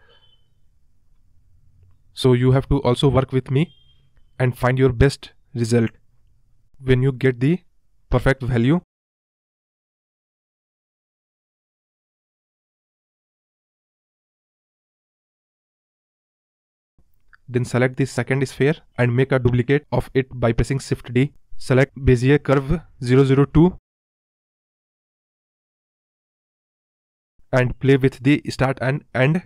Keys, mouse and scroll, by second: 4.6-5.3 right drag, 5.3 click, 5.5 space, 6.4-7.6 scroll up 10, 7.7-9.0 scroll down 8, 8.0 space, 9.0-9.9 middle drag, 9.9 scroll down 1, 10.1-10.4 middle drag, 10.4-11.0 scroll up 1, 11.0-11.4 drag, 11.4 space, 11.7 scroll up 1, 11.9 scroll down 2, 12.2 space, 12.5 click, 13.1-13.6 drag, 13.6 scroll up 2, 13.9 space, 14.4-14.7 scroll up 3, 15.2-15.9 scroll up 1, 16.3 space, 17.3 click, 17.8-18.7 scroll down 4, 18.7 click, 19.9 shift+d, 22.6-24.1 drag, 24.1 space, 24.7-26.1 scroll up 3, 26.5 space, 27.4 click, 27.7-29.3 scroll down 3, 29.3 KP_Decimal.